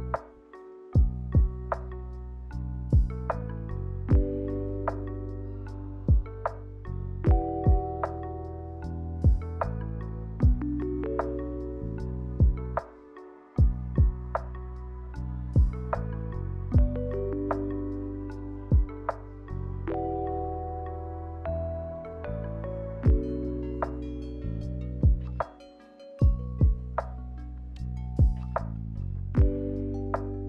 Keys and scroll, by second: 7.3 a, 9.7 ctrl+h, 11.7 a, 12.8 ctrl+h, 20.4 Delete, 21.6 Delete.